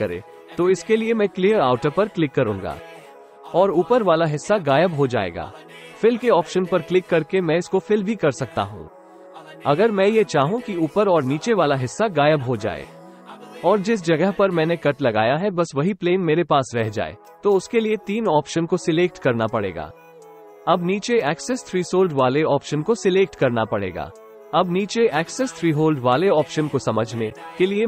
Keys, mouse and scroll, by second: 4.8 click, 6.7-8.2 middle drag, 9.4 right click, 10.1 middle click, 11.3-12.4 middle drag, 16.5-17.7 middle drag, 19.8 click, 20.7-23.4 middle drag, 26.0 click.